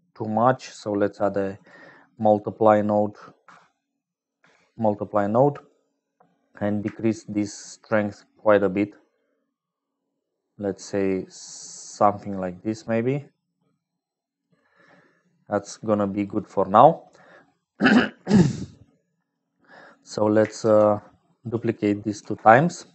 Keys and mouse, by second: 0.0-22.9 typing, 2.1 click, 2.6-3.6 drag, 4.1 click, 5.1 click, 7.8-11.5 shift+drag, 11.5-14.4 shift+right drag, 15.0 click, 15.3-17.3 middle drag, 18.6 click.